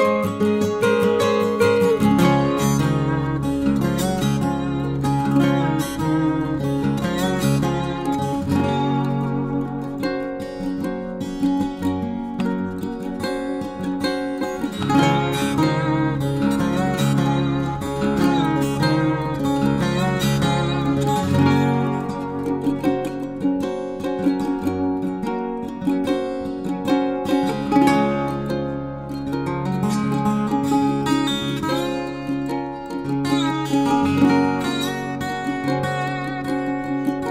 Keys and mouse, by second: 0.2 shift+middle click, 3.4 e, 4.4 click, 4.9 middle click, 5.5 shift+middle click, 6.1 middle click, 6.8 shift+middle click, 7.1 shift+middle click, 7.5 middle click, 8.4 middle click, 9.9 ctrl+r, 12.3-13.3 drag, 13.3 ctrl+r, 15.6-17.7 drag, 17.7 middle click, 18.3 middle click, 19.3 e, 20.6 click, 21.2 middle click, 21.7 shift+middle click, 22.1 middle click, 22.5 shift+middle click, 23.6 middle click, 24.1 shift+middle click, 24.5 middle click, 25.0 shift+middle click, 25.7 shift+middle click, 28.8 ctrl+r, 33.3 click, 33.8 shift+middle click, 36.0 ctrl+r.